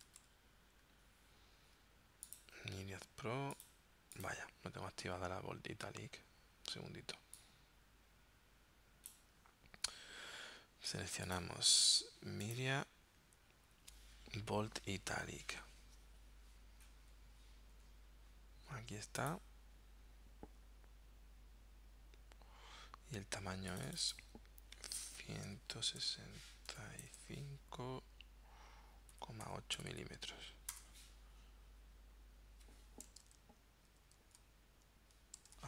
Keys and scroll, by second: 0.0-0.2 typing, 25.5-27.2 typing, 29.2 ,, 29.5 8, 29.8 m, 30.8 Return, 33.3 super+Tab, 34.0 super+Tab, 35.4 super+Tab.